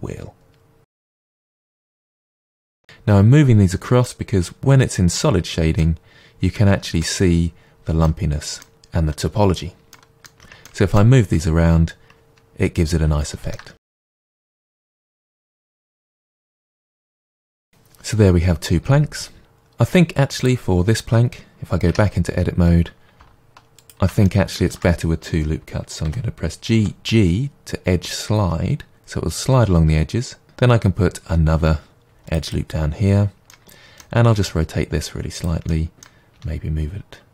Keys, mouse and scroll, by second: 1.5 click, 1.6 g, 2.3 click, 2.5 g, 2.8 click, 4.0-9.9 middle drag, 5.3 Tab, 10.4 Tab, 10.6 middle click, 13.2 shift+middle click, 13.7 click, 13.9-16.7 typing, 14.2 Tab, 14.6 click, 15.2 click, 15.8 click, 16.6 click, 17.1-19.3 scroll down 1, 19.3-20.3 middle drag, 20.3 click, 21.9 Tab, 22.3-23.8 scroll up 1, 23.8 alt+click, 24.2-30.1 shift+middle drag, 26.0 g, 30.4 ctrl+r, 32.5 click, 33.5 middle click, 34.3 r, 35.4 click, 35.7 middle click, 36.3 r.